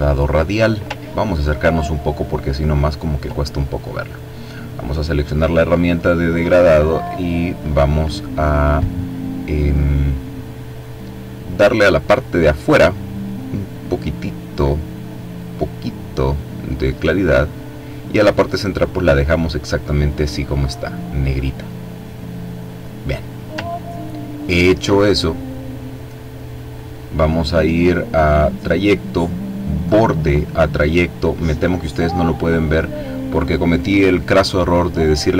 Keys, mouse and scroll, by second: 0.9-1.9 ctrl+scroll up 3, 1.9-2.9 ctrl+scroll down 2, 4.5 click, 6.9 click, 13.8-16.7 drag, 17.6 click, 22.5 click, 23.4-24.5 ctrl+scroll down 2, 28.1 click.